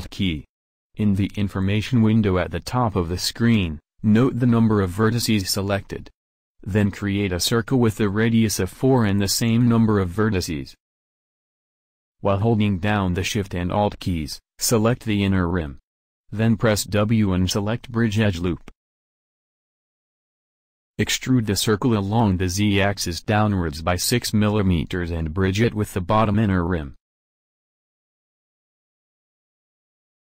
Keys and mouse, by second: 6.2 shift+a, 14.4-16.3 drag, 16.3 w, 19.9 a, 20.8 middle click, 21.6 a, 22.6 a, 24.9 e, 27.1 middle click.